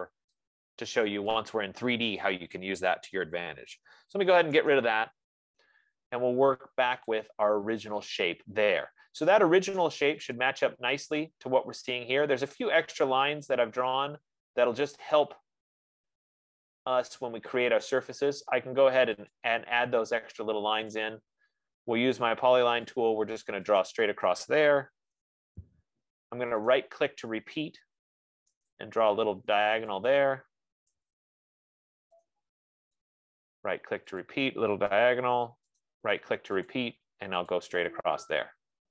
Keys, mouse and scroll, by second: 0.2 click, 1.8 click, 4.2-5.3 typing, 7.5 click, 11.2 click, 19.9 click, 21.3 click, 23.4 click, 24.1 click, 25.3 Return, 27.0 right click, 29.2 click, 30.3 click, 31.3 Return, 32.6 right click, 34.4 click, 34.6 click, 35.6 Return, 36.2 right click, 37.1 click, 37.9 click, 38.2 Return.